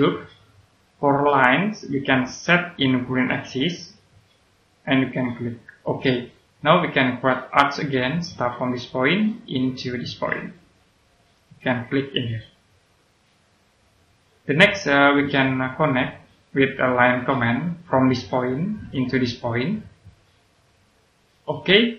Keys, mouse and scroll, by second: 17.1 click, 21.5 middle click.